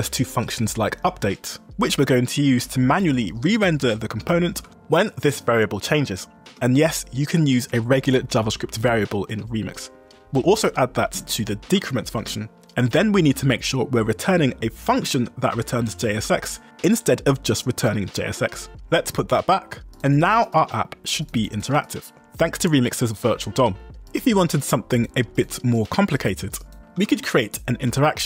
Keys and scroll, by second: 1.1 shift+v, 1.9 Return, 2.2 Escape, 2.3-3.7 typing, 4.7 k, 5.4 shift+v, 6.5 Escape, 9.4 Escape, 10.6 u, 11.7 shift+v, 12.3 Escape, 12.8 j, 16.2 w, 17.0 Escape, 17.3 x, 18.9 u, 22.5-23.8 typing, 26.5-27.8 typing, 27.9 Escape.